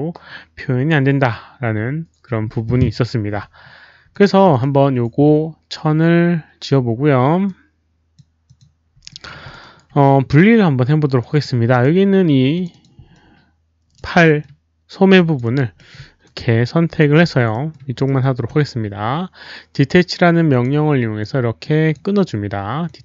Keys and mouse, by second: 4.1 alt+click, 4.4 alt+click, 7.4 alt+click, 8.4 alt+click, 9.0 alt+middle click, 9.4 alt+click, 9.5 alt+right click, 11.1 alt+right click, 11.8 alt+click, 11.8 alt+middle click, 12.5 alt+click, 12.7 alt+click, 13.1 alt+click, 14.2 alt+middle click, 15.1 alt+click, 15.4 alt+right click, 15.7 alt+middle click, 17.5 alt+middle click, 18.0 alt+middle click, 20.4 alt+click, 21.1 alt+click, 22.8 alt+click.